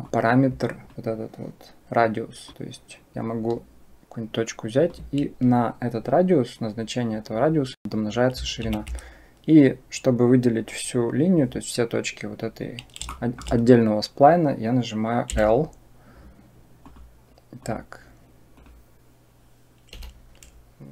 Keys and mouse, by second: 2.4-4.8 drag, 8.4 ctrl+z, 12.9 shift+middle click, 18.4 click.